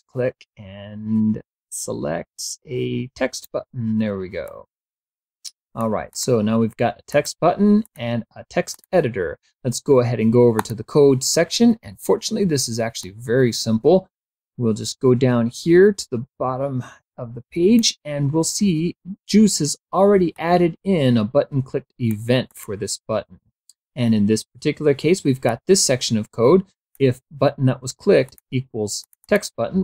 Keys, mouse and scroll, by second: 4.6-6.1 drag, 6.3 click, 7.2 click, 8.0 click, 8.8 click, 10.7 click, 13.2-18.1 drag, 20.5-22.4 drag, 22.7 click, 25.6-27.3 drag, 28.4 click, 29.2 click.